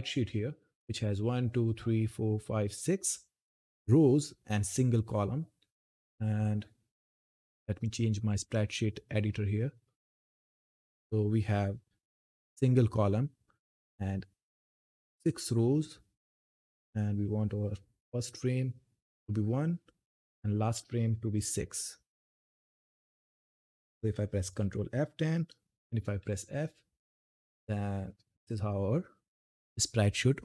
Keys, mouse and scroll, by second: 6.2-12.6 drag, 13.0-22.9 drag, 22.9 click, 24.4 ctrl+F10, 26.0-26.4 typing, 29.4 typing.